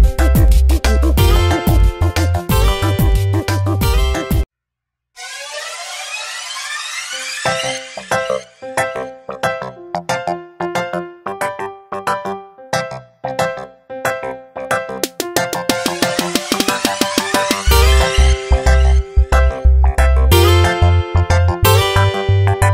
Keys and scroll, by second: 7.2 space, 10.5 ctrl+z, 11.7 ctrl+z, 17.7 space.